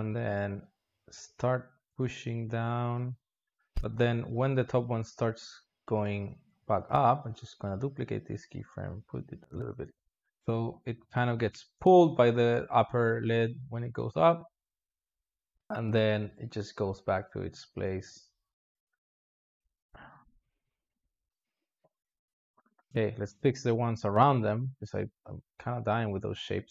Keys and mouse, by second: 3.6-6.1 drag, 6.1 shift+d, 9.5-10.6 drag, 10.6 alt+shift+z, 11.3-14.4 drag, 15.4-18.5 drag, 19.5 click, 19.7 s, 20.8 click, 20.9 space, 22.6 space, 22.9-24.0 drag, 24.0 alt+shift+z, 25.1-26.5 drag.